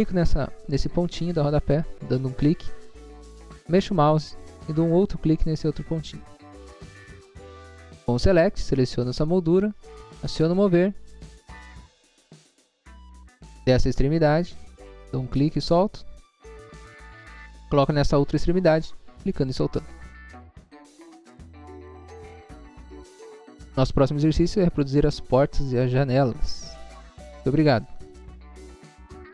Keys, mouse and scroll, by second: 1.4 click, 1.8 scroll down 1, 2.4 scroll down 1, 3.8 scroll up 1, 4.5 scroll up 1, 6.1 click, 6.5 scroll down 1, 7.0 scroll down 1, 8.2 click, 8.6 click, 10.2 click, 11.4 click, 11.6 click, 11.8 scroll down 1, 12.3 scroll up 1, 12.9 scroll up 1, 15.2 click, 15.6 scroll down 1, 17.1 scroll up 1, 18.8 click, 19.5 scroll down 1, 20.0 scroll down 1, 21.4 click, 22.1 click, 22.5 scroll down 1.